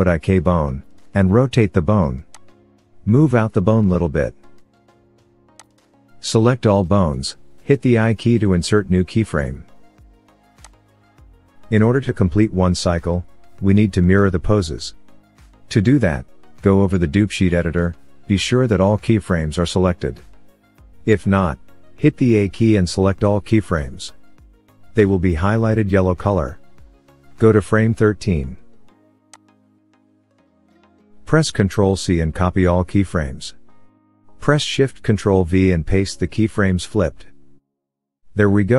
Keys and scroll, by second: 0.0 r, 3.2 g, 7.0 a, 9.1 i, 16.7 a, 16.9 a, 21.3 a, 21.5 a, 22.1 a, 33.0 ctrl+c, 35.7 ctrl+shift+-.